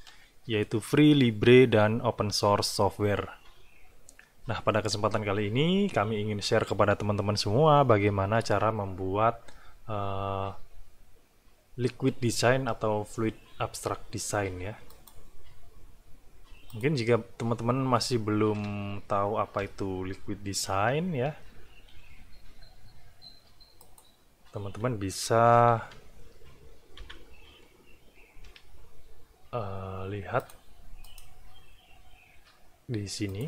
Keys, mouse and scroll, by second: 14.9 click, 16.7 click, 20.7 BackSpace, 23.8 click, 25.5 BackSpace, 27.0 Page_Up, 28.4 F4, 30.4 click, 31.0 right click, 33.3 click.